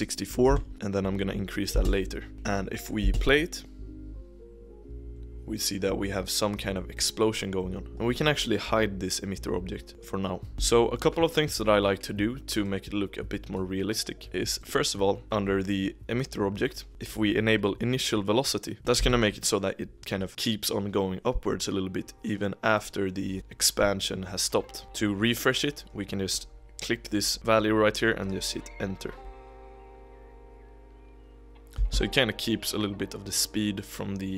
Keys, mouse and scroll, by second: 0.7-1.7 drag, 1.7 space, 2.3 KP_1, 3.1 space, 7.4 click, 9.9-10.6 middle drag, 10.6 space, 12.7-14.6 drag, 16.9-18.8 scroll down 6, 18.9 KP_1, 22.8-23.3 drag, 23.3 space, 24.8 click, 26.2-29.1 drag, 29.2 space, 31.8 space.